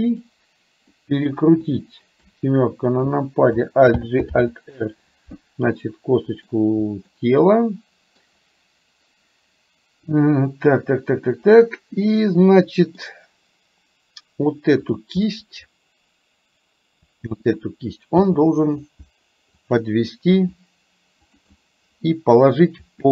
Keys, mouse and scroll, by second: 0.1 click, 0.9 middle click, 2.2 KP_7, 3.9 alt+g, 4.3 alt+r, 5.8 middle click, 7.2-8.2 middle drag, 11.3-12.9 middle drag, 14.9 click, 15.3-17.4 middle drag, 18.3 g, 20.4 r, 21.7-22.7 middle drag, 22.9 r.